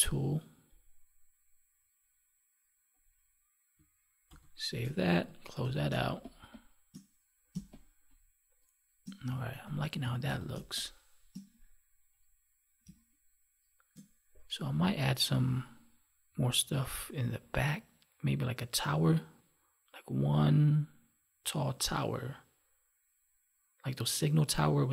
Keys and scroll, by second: 4.2 ctrl+s, 5.0 ctrl+w, 5.8 space, 10.5 space, 12.8 space.